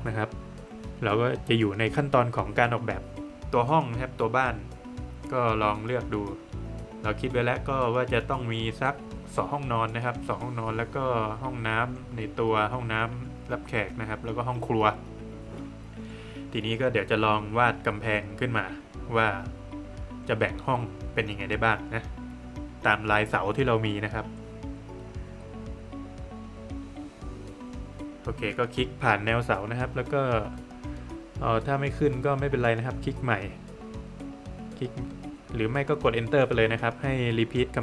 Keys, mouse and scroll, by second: 0.3 scroll down 1, 0.5 middle click, 11.1 middle click, 12.8 scroll down 1, 13.0 middle click, 20.1 middle click, 20.8-21.2 scroll up 1, 24.2 click, 26.6 scroll up 2, 28.1 click, 30.4 scroll down 1, 30.6 middle click, 31.2-31.5 scroll down 1, 31.7 middle click, 34.1 space, 35.3 click, 35.8-36.9 scroll up 1, 37.2 click, 37.5 scroll down 1, 37.7 middle click.